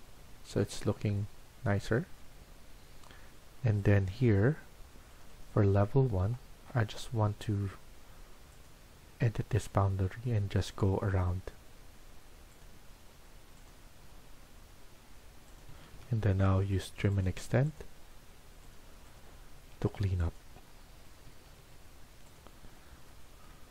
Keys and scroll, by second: 15.6 Escape, 15.8 Escape, 16.1-18.2 typing, 19.4 Escape, 20.2-21.7 typing.